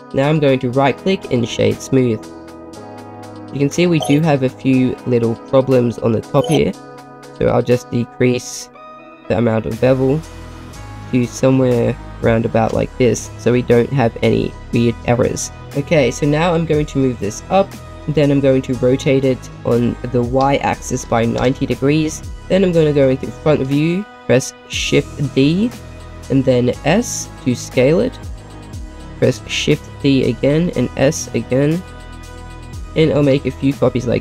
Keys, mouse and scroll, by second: 1.5 right click, 2.0 middle click, 3.1 scroll up 3, 7.2-10.4 shift+drag, 10.7-12.8 shift+drag, 13.1 middle click, 15.6 scroll down 1, 15.9 middle click, 16.6 g, 16.7 z, 17.2 middle click, 17.7 click, 17.8 Escape, 17.8 middle click, 17.8-18.6 scroll down 2, 17.8 r, 18.7 r, 19.0 x, 20.4 y, 21.0 9, 21.0 0, 21.4 Return, 22.1 middle click, 22.3 click, 22.3 middle click, 22.3 g, 22.3 z, 22.9 click, 24.0-24.8 scroll up 2, 25.0 shift+d, 26.8 s, 28.9 click, 29.4 shift+d, 30.5 s, 32.3 click, 32.8 shift+d, 33.1 s.